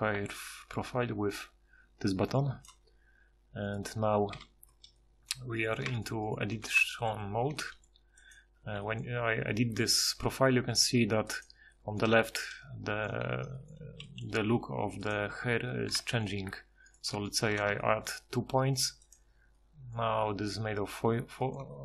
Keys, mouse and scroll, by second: 0.3 ctrl+shift+h, 2.7 ctrl+shift+h, 4.3 KP_Divide, 7.5 g, 8.8 g, 14.0 g, 15.3 z, 15.5 z, 17.7 e.